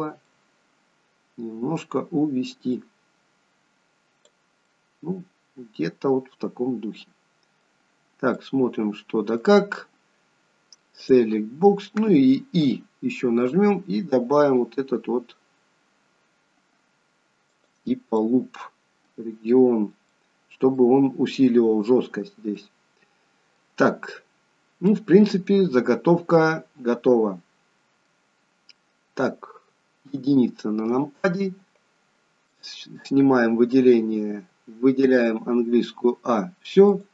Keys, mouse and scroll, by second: 0.2 click, 0.2 middle click, 2.7 click, 4.6 middle click, 7.9-8.9 scroll up 3, 8.3 middle click, 9.6-10.9 scroll down 3, 10.9 click, 13.4 i, 18.1 middle click, 19.3-20.0 scroll up 1, 20.0 middle click, 20.0-21.1 scroll up 1, 22.0-22.5 scroll down 2, 22.5 middle click, 24.4-25.5 scroll down 2, 24.9 middle click, 30.0 KP_1, 32.5 click, 35.0 a, 36.9 click.